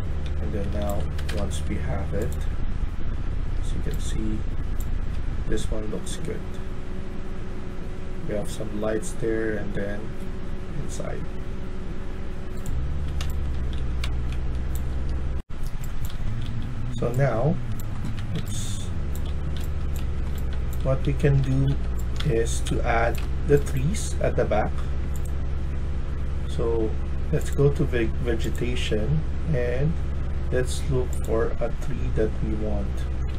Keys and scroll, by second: 0.5 a, 1.1 Escape, 1.3 Escape, 2.7-3.4 w, 3.8 e, 8.6-9.4 typing, 12.8-14.7 typing, 15.9-23.1 typing, 33.0-33.3 typing.